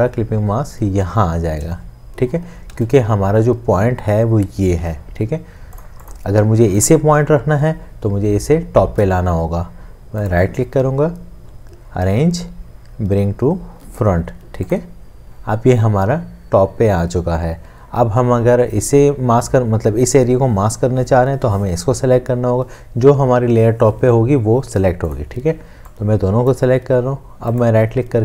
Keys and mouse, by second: 2.7 ctrl+z, 10.3 right click, 27.6 right click.